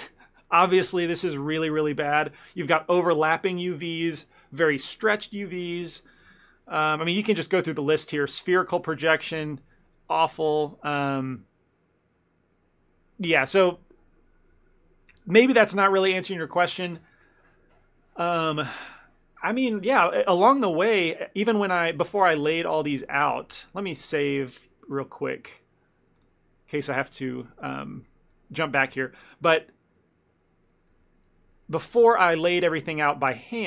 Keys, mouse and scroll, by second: 8.2 u, 20.7 ctrl+z, 21.1 ctrl+z, 22.4 ctrl+z, 22.9 ctrl+z, 23.4 ctrl+z, 23.9 ctrl+shift+z, 26.2 click, 28.0 shift+middle click, 29.1 ctrl+z, 29.3 ctrl+z, 30.0 ctrl+z, 30.6 ctrl+z, 30.8 ctrl+z, 31.0 ctrl+z, 31.1 ctrl+z, 32.2 ctrl+z, 32.3 ctrl+z, 33.1 ctrl+z, 33.2 ctrl+z.